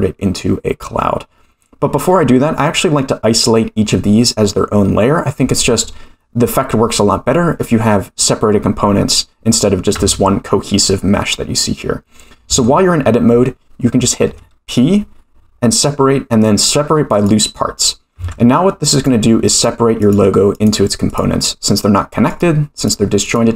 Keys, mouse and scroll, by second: 10.0 Tab, 12.5 Tab, 14.3 p, 18.2 Tab, 18.9 click, 19.5 click, 20.0 click, 20.5 click, 21.0 click, 22.3 click, 22.7 click, 23.2 click.